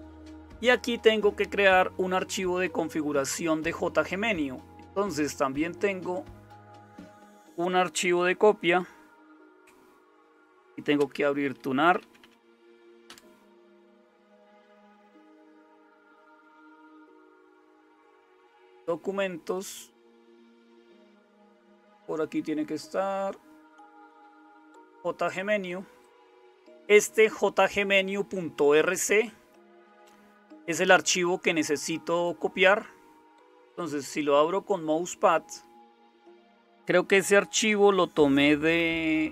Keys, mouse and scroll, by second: 11.0 super+space, 11.7-13.1 typing, 38.8 super+m.